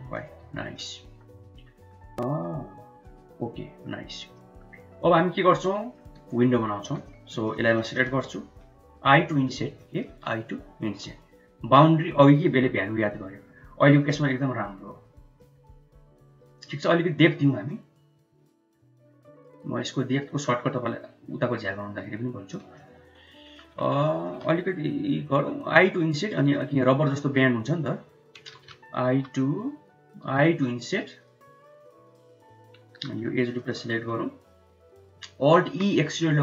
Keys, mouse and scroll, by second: 0.5 Tab, 0.9-2.0 middle drag, 2.1 Tab, 2.3 middle click, 2.7 Tab, 3.1-3.7 middle drag, 4.2 middle click, 4.6 Tab, 5.1 middle click, 6.6 3, 6.8 click, 7.6 shift+middle click, 8.0 middle click, 10.8 1, 17.6-22.5 shift+drag, 22.6 middle click, 23.9 shift+middle click, 28.3 ctrl+z, 29.0 u, 30.1 i, 32.8 3, 33.5 alt+click, 34.6 middle click, 35.5 alt+e.